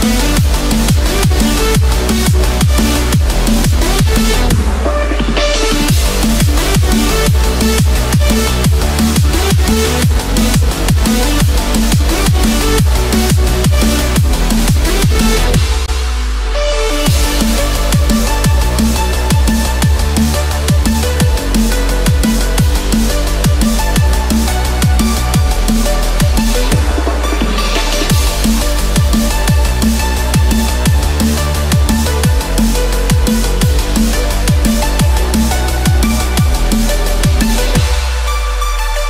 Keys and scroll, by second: 0.2 ctrl+0, 3.6 ctrl+=, 5.2 ctrl+=, 10.1 ctrl+-, 17.0 ctrl+-, 21.0 ctrl+-, 21.3 ctrl+=, 24.8 ctrl+-, 25.2 ctrl+0, 27.5 ctrl+=, 27.9 ctrl+space, 31.3 ctrl+-.